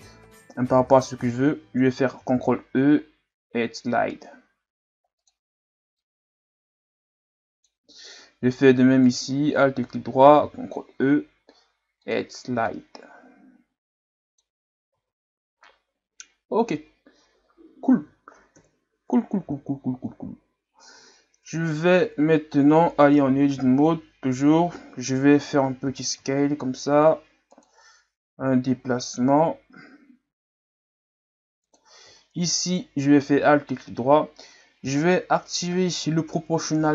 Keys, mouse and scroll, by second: 2.2 ctrl+e, 8.0-9.0 scroll down 2, 9.0 alt+right click, 10.4 ctrl+e, 14.9 Tab, 15.6-18.6 middle drag, 18.6 KP_3, 19.7 scroll down 2, 20.5-21.3 scroll down 1, 21.4 Tab, 23.3 l, 23.5 l, 25.8 s, 28.4 g, 32.6 alt+right click, 33.6-34.4 scroll down 3, 34.4 scroll up 1, 35.9-36.9 ctrl+scroll up 1.